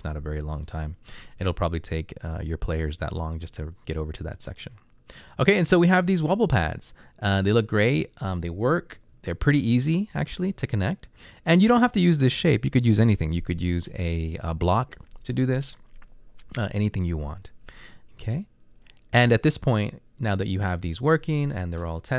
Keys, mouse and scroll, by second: 9.1 Right, 9.6 Left, 10.1 Up.